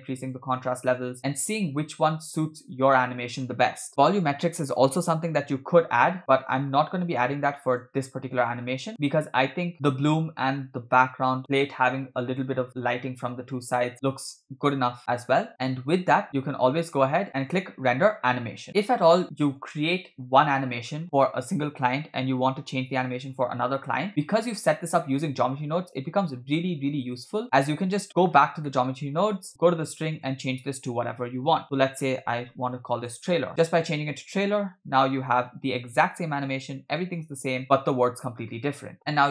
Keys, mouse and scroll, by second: 0.2-1.2 drag, 6.2 space, 6.5 space, 7.9-8.3 drag, 8.4 click, 9.0 click, 9.9 click, 15.5-16.2 scroll down 3, 16.2-17.1 scroll down 1, 17.5-18.7 drag, 19.2 click, 26.0-28.0 drag, 28.3-28.7 scroll down 2, 28.7 middle click, 29.5-30.0 scroll up 1, 30.0 scroll up 3, 30.2-33.5 drag, 37.2 click, 37.6 space.